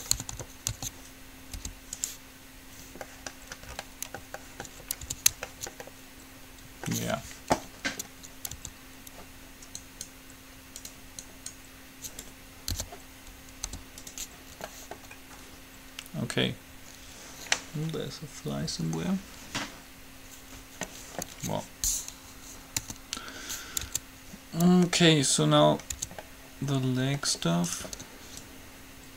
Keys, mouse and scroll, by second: 0.0 middle click, 0.4 a, 0.7 a, 0.9 a, 1.7 u, 5.4 Tab, 8.0 middle click, 8.9 Tab, 10.0-11.9 right drag, 12.9 p, 13.9 u, 14.9 middle click, 22.5 KP_3, 22.9 KP_3, 24.1 Tab, 26.4 Tab, 27.9 right click, 28.8 ctrl+click.